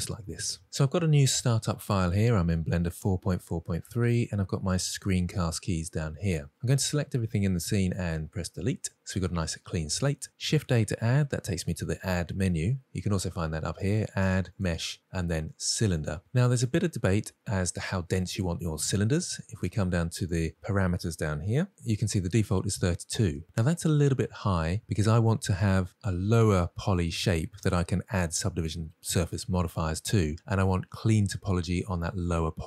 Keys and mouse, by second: 6.6-6.9 drag, 8.2 Delete, 10.7 shift+a, 13.5-16.1 drag, 19.7 click.